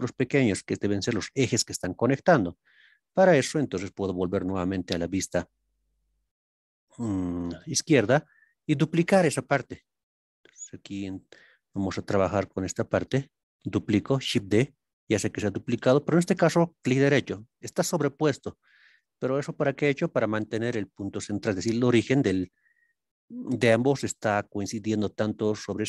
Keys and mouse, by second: 4.4 ctrl+KP_3, 10.1 click, 11.9 shift+click, 12.8 shift+middle click.